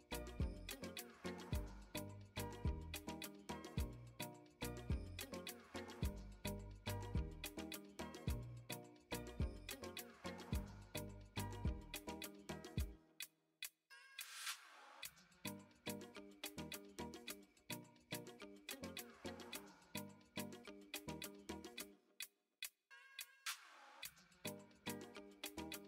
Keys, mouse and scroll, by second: 1.8 middle click, 2.1 Tab, 4.4 e, 7.5 middle click, 8.4 shift+middle click, 8.9 middle click, 9.5 shift+middle click, 10.5 ctrl+r.